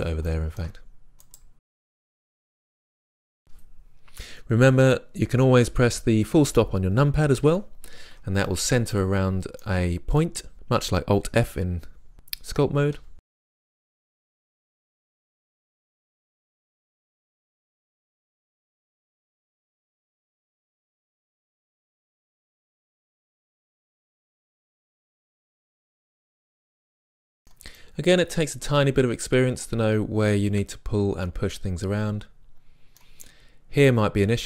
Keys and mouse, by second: 1.3-3.0 right drag, 7.5 KP_Decimal, 13.0-16.6 typing, 13.3-13.8 drag, 14.0-14.6 drag, 14.6 right click, 14.6 click, 14.8 right click, 15.2 click, 16.0 middle click, 16.5-16.8 drag, 16.8 right click, 16.9 middle click, 17.0 click, 17.2 right click, 18.0 click, 18.1 g, 18.6 right click, 18.6 click, 19.6 right click, 19.8-24.0 typing, 20.0 click, 20.5 click, 21.0 click, 21.4 right click, 22.0 click, 22.2 middle click, 22.4 click, 23.0 click, 23.3 click, 23.6 click, 24.3 click, 25.1 middle click, 25.4 click, 26.0 click, 26.1 g, 26.4 click, 27.3-29.7 middle drag.